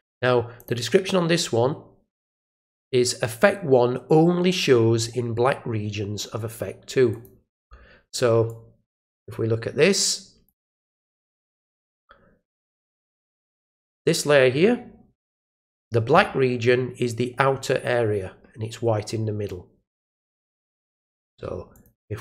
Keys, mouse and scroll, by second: 0.6 click, 7.1 click, 8.5-10.4 drag, 11.7 click, 13.8 click, 19.4-21.3 drag, 21.7 click.